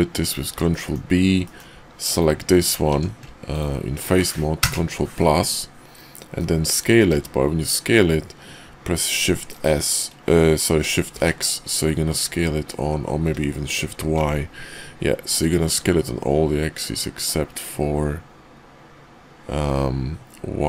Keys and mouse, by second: 0.7 middle click, 1.4 middle click, 2.9 Tab, 4.5 ctrl+KP_Add, 6.3 middle click, 7.0 s.